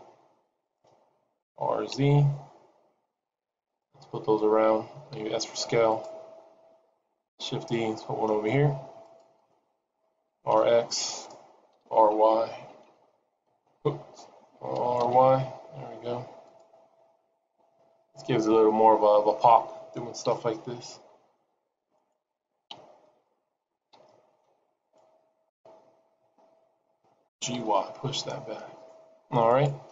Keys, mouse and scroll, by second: 1.8 r, 5.1 s, 7.4 shift+d, 10.2 r, 11.9 y, 13.2 y, 14.7 r, 20.4 shift+d, 22.0 shift+d, 22.6 KP_7, 23.8 g, 25.4 KP_0, 27.4 g.